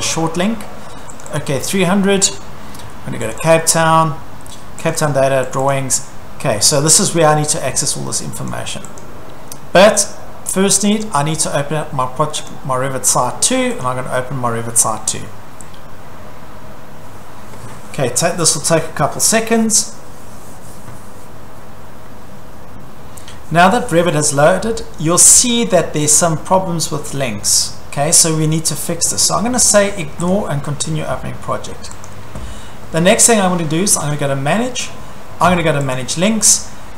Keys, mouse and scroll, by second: 1.2 click, 1.4 click, 3.4 click, 3.5 click, 4.9 click, 5.1 click, 5.6 click, 5.7 click, 8.5 click, 9.0 click, 10.9 click, 11.0 click, 12.5 click, 13.8 click, 30.3 click, 32.1 click, 34.1 click, 36.0 click.